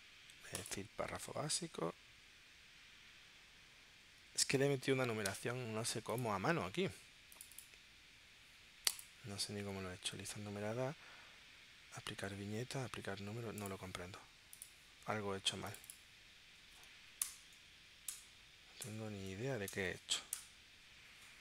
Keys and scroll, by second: 17.2 BackSpace, 18.1 BackSpace, 18.8 BackSpace, 19.7 BackSpace.